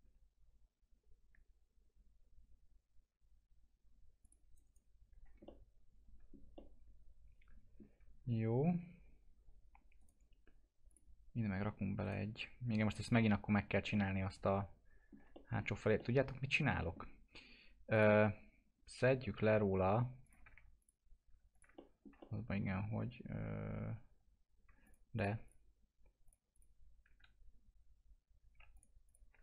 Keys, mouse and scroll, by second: 0.5 click, 4.2 click, 4.5 right click, 5.2 scroll down 1, 5.4-10.0 alt+middle drag, 10.0 right click, 10.9 click, 12.0 right click, 13.5-13.8 scroll down 1, 13.9 alt+middle click, 17.9 click, 20.2 click, 20.8 click, 21.7 alt+middle click, 24.8 ctrl+click, 27.5 scroll up 1, 28.7 alt+click.